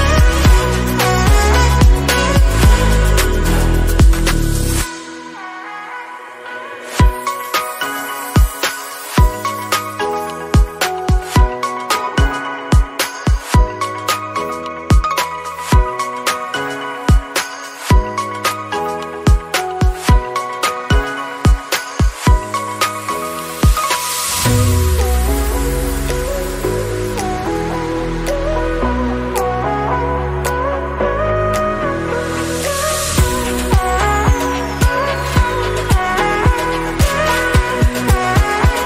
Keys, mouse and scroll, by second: 0.6 alt+shift+click, 0.9 scroll down 1, 1.1 middle click, 1.8 click, 2.1 scroll up 2, 2.3 shift+middle click, 2.9 scroll up 1, 3.1-4.1 middle drag, 4.1 ctrl+b, 8.6 Tab, 8.9 scroll down 1, 9.1 middle click, 9.6 scroll up 2, 9.9 shift+middle click, 10.5-10.9 scroll up 1, 11.2 ctrl+z, 11.7 ctrl+z, 12.5 ctrl+b, 18.4 Tab, 19.5 right click, 20.1 click, 20.3 scroll down 4, 20.6 middle click, 21.5-21.9 scroll up 5, 21.9-22.3 scroll down 2, 22.3 click, 22.7 Tab, 23.1 click, 23.8 3, 23.9 click, 24.6 i, 25.7 Tab, 26.2 scroll down 1, 26.5 middle click, 27.0-27.6 scroll up 4, 27.6 middle click, 28.1 KP_1, 28.9 shift+middle click, 29.4 alt+z, 29.8 shift+middle click, 30.3 shift+a, 32.7 Tab, 33.0 scroll up 1, 33.3 s, 34.1-35.3 drag, 35.3-35.9 scroll up 1, 35.9 click, 36.5 scroll down 1, 36.7 shift+middle click, 37.4 e.